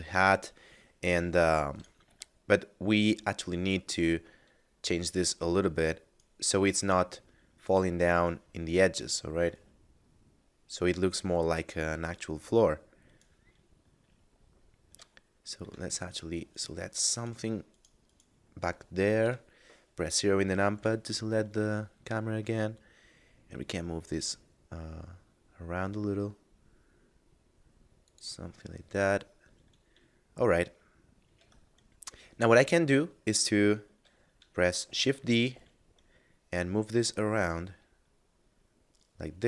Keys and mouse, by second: 1.7 right click, 2.1 Tab, 4.0 right click, 9.5 right click, 12.1 right click, 14.3 middle click, 15.3 shift+middle click, 16.5 right click, 19.1 KP_0, 20.8 g, 28.1 click, 28.7 middle click, 31.4 Tab, 34.9 shift+d, 35.3 y.